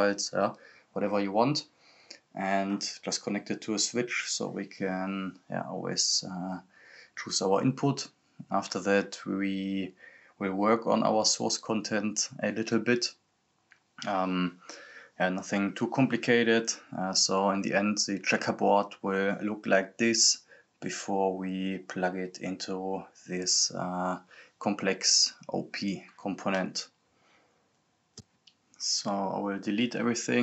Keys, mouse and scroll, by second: 3.6-9.4 drag, 9.4 scroll down 1, 14.0-15.3 drag, 15.3 scroll up 1, 16.9 click, 17.8 scroll up 1, 20.4 scroll down 1, 21.5-23.4 drag, 23.4 scroll up 1, 28.0-29.1 scroll down 1, 29.1 click, 30.1-30.4 scroll down 1.